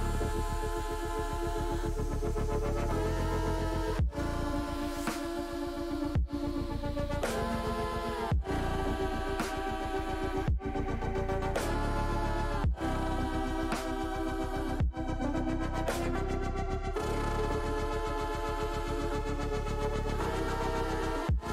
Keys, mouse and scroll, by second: 1.2 s, 2.0 ctrl+click, 2.3 ctrl+z, 4.0 click, 5.4-7.7 drag, 8.5 s, 9.5 click, 9.9 click, 13.5-14.7 drag, 15.1 s, 16.4 click, 17.4 middle click, 18.0 middle click, 18.9 KP_7, 20.0 KP_9.